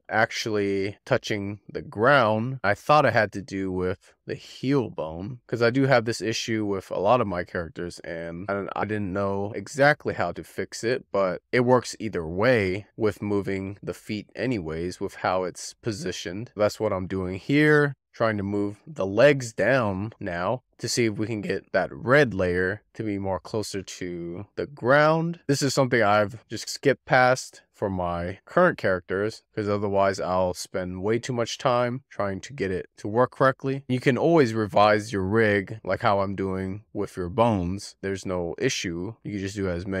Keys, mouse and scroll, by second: 0.5-1.3 scroll up 2, 1.3-4.5 middle drag, 4.5 click, 5.5 click, 6.6 click, 8.5 z, 8.8-10.0 middle drag, 10.0 click, 10.5-12.5 middle drag, 12.5 click, 14.1 z, 17.7 click, 18.0-19.5 middle drag, 19.5 click, 21.1 z, 23.4 click, 23.6 click, 23.7 scroll up 1, 23.9 middle click, 24.3 scroll down 1, 24.5 click, 24.9 scroll up 2, 25.0 scroll down 1, 25.1 click, 25.7 click, 27.1 click, 27.5 click, 27.7 click, 28.3 click, 28.5 click, 29.2 click, 29.4 click, 29.8 middle click, 30.4 scroll up 2, 30.7 scroll down 3, 30.9 middle click, 34.8-35.2 scroll down 4, 35.5 click, 35.8-36.1 scroll down 4, 36.6 shift+middle click, 37.3 scroll up 2, 38.8 a, 39.5-40.0 drag.